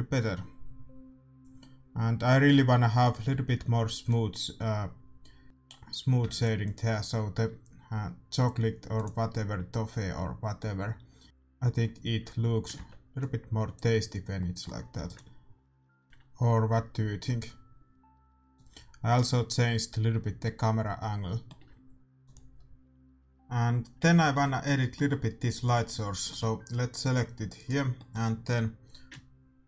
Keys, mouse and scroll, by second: 3.7 ctrl+b, 6.3 ctrl+s, 6.8 click, 10.1 click, 11.2 click, 11.9 middle click, 12.7 ctrl+b, 15.0 ctrl+s, 18.1 middle click, 18.6-20.7 drag, 19.6-22.3 middle drag, 22.3 click, 22.3 right click, 23.0-25.5 middle drag, 28.1 right click, 28.4-29.6 middle drag, 29.1-29.6 drag, 29.1 right click.